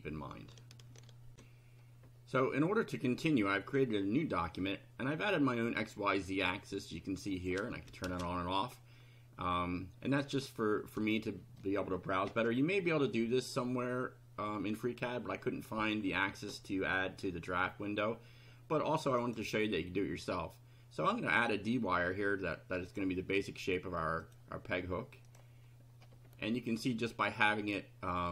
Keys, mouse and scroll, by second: 1.3 ctrl+r, 7.4 click, 9.0 scroll up 1, 9.8 scroll up 2, 11.1-11.7 shift+middle drag, 19.2 click, 21.4 click, 22.9 click, 24.2 click, 25.3 click, 27.2 click, 27.8-28.3 middle drag.